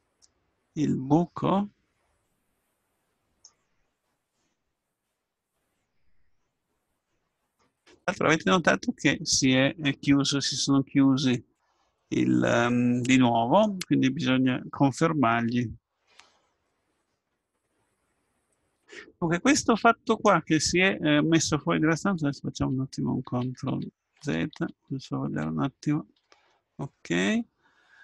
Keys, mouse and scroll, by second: 0.2 middle click, 5.0 x, 6.9-8.9 middle drag, 10.4-12.2 middle drag, 20.1-22.1 right drag, 22.2 ctrl+z, 22.5 ctrl+z, 23.3 ctrl+z, 23.7 ctrl+z, 24.2 ctrl+z, 24.5 ctrl+z, 24.9 ctrl+z, 25.3 ctrl+z, 26.5 middle click, 26.8 middle click, 27.5 middle click.